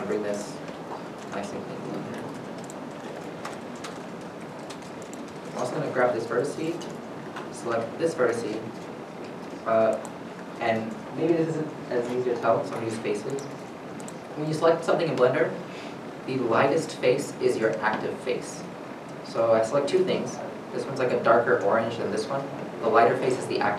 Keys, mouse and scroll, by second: 0.2 g, 0.3 y, 2.3 middle click, 2.6 scroll down 1, 3.1 2, 3.7 middle click, 4.1 scroll up 1, 5.2 middle click, 5.6 scroll down 1, 6.0 middle click, 7.0 middle click, 7.3 scroll up 1, 8.4 shift+click, 12.1 scroll down 1, 16.0 shift+middle click, 20.1 shift+click, 22.5 shift+click, 22.7 shift+middle click.